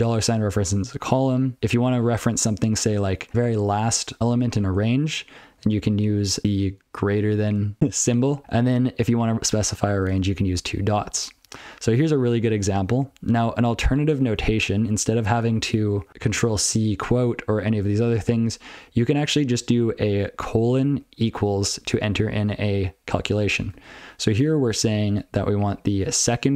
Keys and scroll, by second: 0.3 ctrl+f, 0.6 ctrl+f, 0.7 ctrl+n, 1.3 ctrl+a, 1.6 ctrl+l, 3.3 ctrl+f, 5.6 ctrl+b, 6.0 ctrl+f, 6.1 ctrl+b, 8.1 ctrl+n, 8.4 ctrl+b, 10.1 ctrl+space, 10.2 ctrl+f, 10.4 ctrl+f, 11.1 ctrl+n, 11.3 ctrl+n, 11.7 ctrl+p, 11.9 ctrl+n, 12.4 ctrl+n, 12.7 ctrl+n, 12.9 ctrl+n, 13.1 ctrl+n, 13.4 ctrl+l, 14.2 ctrl+n, 15.0 ctrl+p, 15.2 ctrl+p, 15.5 ctrl+n, 15.9 ctrl+n, 18.1 ctrl+n, 18.3 ctrl+n, 18.8 ctrl+b, 19.0 ctrl+b, 19.2 ctrl+b, 19.4 ctrl+b, 20.9 ctrl+f, 21.1 ctrl+f, 21.6 ctrl+f, 23.8 ctrl+f, 24.1 ctrl+f, 24.5 ctrl+f, 24.9 ctrl+b, 25.1 ctrl+b, 25.3 ctrl+b, 25.9 ctrl+f.